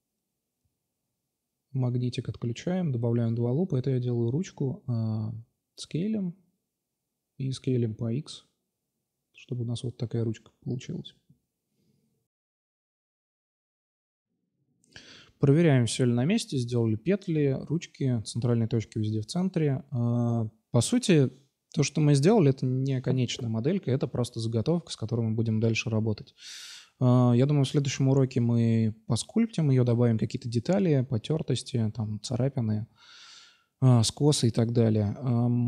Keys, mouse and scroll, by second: 1.3 click, 1.9 ctrl+r, 2.8 s, 4.8 middle click, 5.0 s, 6.1 s, 7.9 s, 9.5 Tab, 10.2-10.8 drag, 10.9-11.9 middle drag, 12.7-13.9 middle drag, 14.9 ctrl+s, 16.8-17.3 right drag, 18.2 middle drag, 19.3-20.6 right drag, 22.5 ctrl+s.